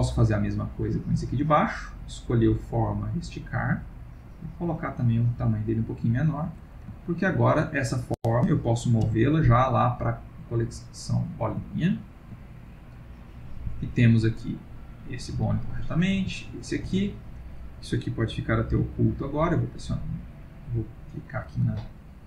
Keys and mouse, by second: 0.4 click, 2.1-5.1 click, 6.1 click, 7.0 ctrl+middle click, 7.3 middle click, 7.8 click, 9.0 m, 11.7 ctrl+middle click, 13.1 click, 13.8 g, 15.9 click, 16.2 g, 17.4 click, 21.1 click, 21.9 ctrl+middle click, 22.0 ctrl+middle click.